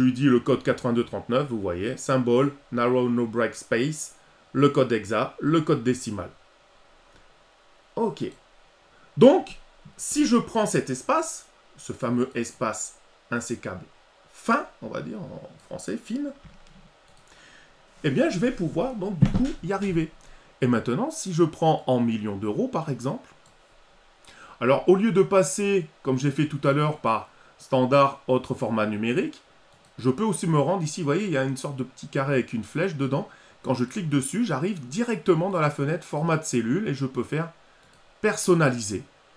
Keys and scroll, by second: 15.8 ctrl+c.